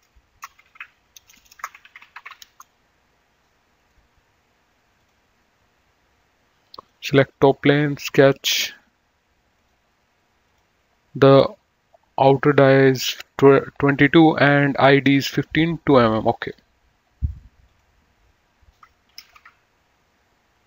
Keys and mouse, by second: 0.5-2.9 typing, 3.8 right click, 5.1 click, 7.0 click, 9.8 click, 16.6 click, 17.8 click, 19.4 KP_2, 19.6 Return.